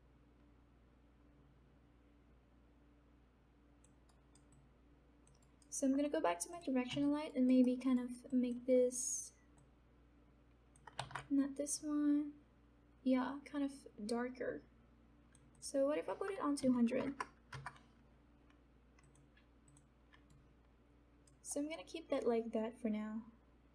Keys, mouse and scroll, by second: 4.0 alt+right click, 4.5 alt+click, 5.4 alt+right click, 6.8 click, 7.2 alt+right click, 8.3 alt+click, 9.5-11.0 drag, 11.0 ctrl+z, 11.7 click, 12.0-15.5 drag, 18.9 click, 20.5 alt+right click, 21.7 alt+middle click, 22.4-23.7 alt+drag.